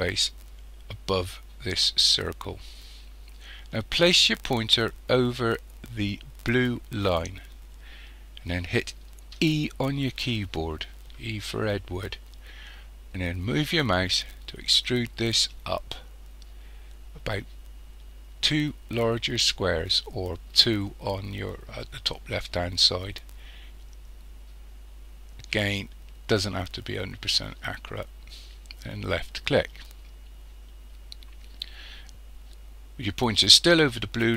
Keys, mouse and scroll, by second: 9.4 e, 29.2 click.